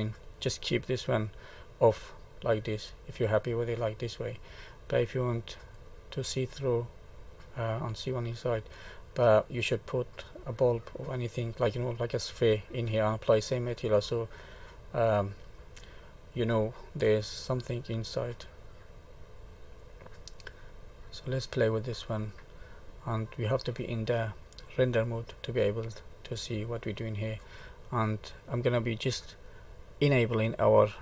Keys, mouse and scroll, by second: 2.3 middle click, 5.5 click, 6.3 middle click, 14.3 middle click, 16.6-17.1 scroll up 1, 17.5 middle click, 21.2 click, 22.5-23.1 scroll down 2, 23.1 middle click, 25.0 click, 26.2 middle click, 27.6 scroll down 1, 28.2 middle click, 30.0 click.